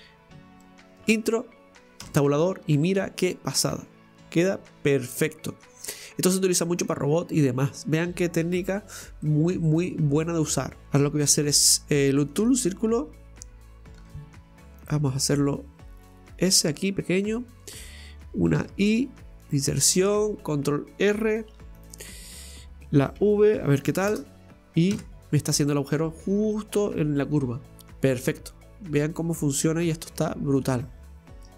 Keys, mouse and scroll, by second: 2.8-5.8 middle drag, 5.8-6.7 scroll down 2, 6.7-8.6 middle drag, 8.6 scroll up 2, 9.3 middle click, 9.7-10.8 scroll down 2, 14.9 shift+s, 19.8-21.5 scroll up 3, 21.5 ctrl+r, 22.5 middle click, 23.2 v, 25.0 Tab, 25.3 scroll down 1, 25.7-28.7 middle drag, 29.4-30.7 scroll up 3, 30.9 scroll down 2, 31.4-31.5 shift+middle drag.